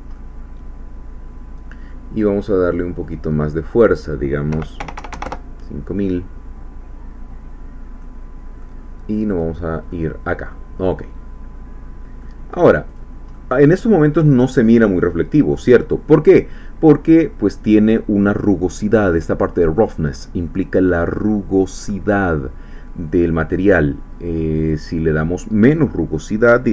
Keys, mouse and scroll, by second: 3.0-4.5 drag, 4.5 KP_5, 4.8 KP_0, 5.2 KP_Enter, 7.7 scroll down 1, 8.0 middle click, 9.3 click, 9.9-12.4 middle drag, 12.5 scroll up 1, 12.9 click, 13.3 middle click, 14.6 scroll up 2, 15.0 middle click, 24.6-26.7 drag.